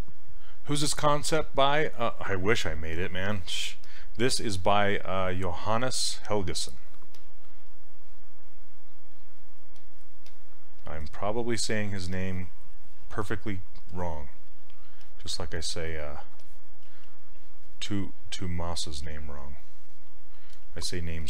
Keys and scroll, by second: 5.8 ctrl+z, 16.9 s.